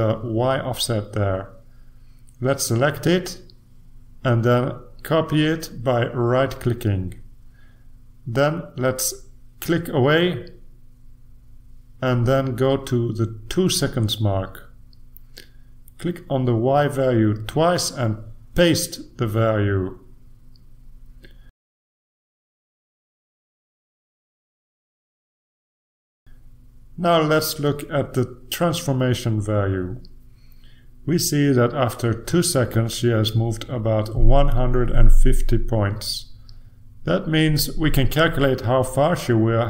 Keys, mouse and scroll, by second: 4.4 ctrl+c, 5.6 click, 6.2 click, 7.8 click, 9.5 click, 11.7 click, 14.0 click, 15.7 click, 17.7-19.2 drag, 19.6 BackSpace, 19.9 BackSpace, 22.2-23.4 right drag, 23.5 click, 25.5 Return, 31.1-32.3 drag, 35.7 click.